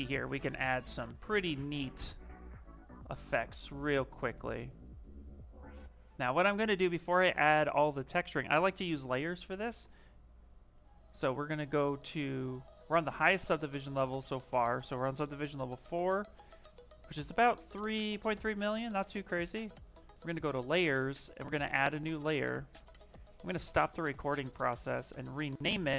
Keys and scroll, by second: 6.8 ctrl+z, 7.0 ctrl+z, 7.2 ctrl+z, 7.6 ctrl+z, 8.4 ctrl+z, 9.0 ctrl+z, 9.6 ctrl+z.